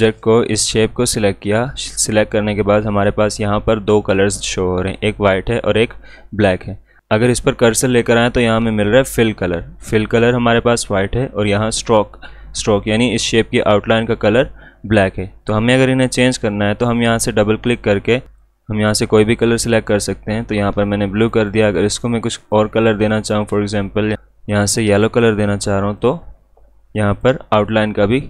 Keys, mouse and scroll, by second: 16.8-24.5 drag, 24.5-28.2 drag.